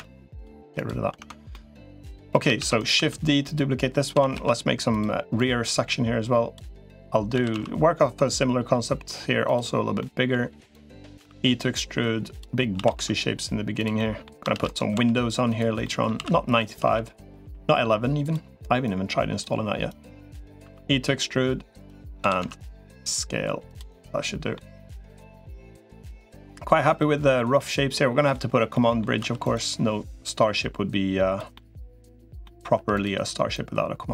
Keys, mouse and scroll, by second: 1.1 Tab, 1.3 middle click, 2.5 shift+d, 2.7 s, 3.9 s, 5.3-6.3 drag, 7.1 s, 9.8 middle click, 10.5 click, 11.1 e, 12.5 s, 13.7 middle click, 14.3 shift+d, 14.7 s, 15.6 middle click, 15.9 s, 18.7 click, 19.7 click, 20.5 e, 22.1 s, 23.7 middle click, 25.1 middle click, 25.8 middle click, 26.8 middle click, 27.3 middle click, 28.5 middle click, 29.1 2, 30.3-31.3 drag, 31.3 middle click, 32.2 middle click, 32.7 click, 32.7 3, 33.3-34.1 drag.